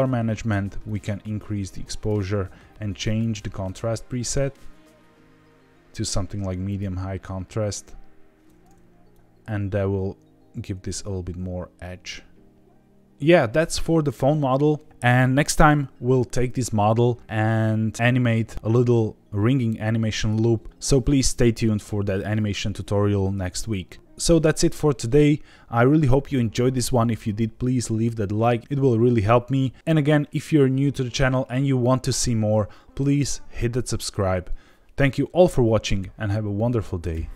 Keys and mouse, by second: 0.9-2.1 drag, 3.2-6.8 drag, 9.1-13.0 drag.